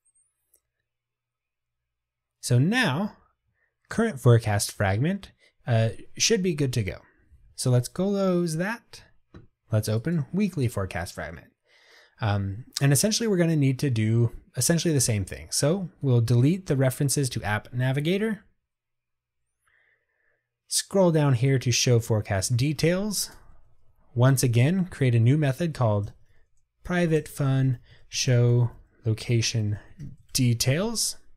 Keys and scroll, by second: 30.8 ctrl+shift+super+Return.